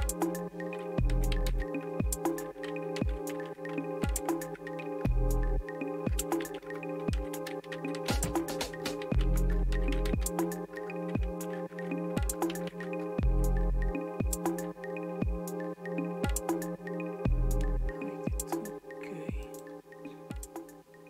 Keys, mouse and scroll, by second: 1.3-13.2 typing, 8.7 Return, 19.5 click.